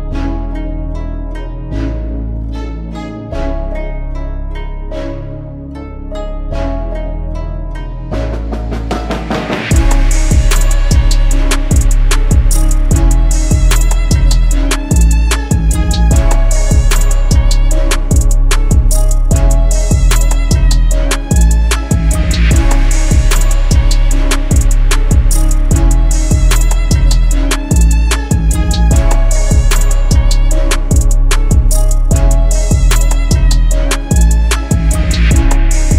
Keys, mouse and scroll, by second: 7.8-9.0 scroll up 1, 9.0 typing, 20.6 ctrl+t, 21.5 alt+shift+click, 27.3 alt+shift+click, 31.9 ctrl+t, 32.5 alt+shift+click, 35.7 alt+shift+click.